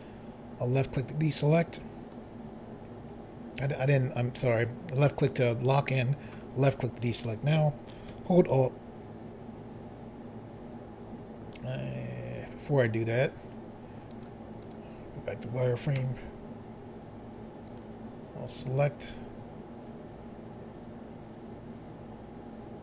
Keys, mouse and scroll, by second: 6.2 click, 14.1 click, 14.6 click, 16.0 b, 17.7 click.